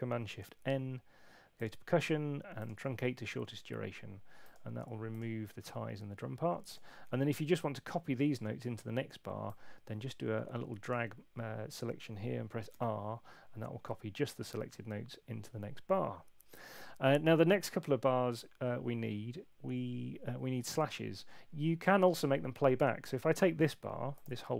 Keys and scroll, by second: 12.7 r.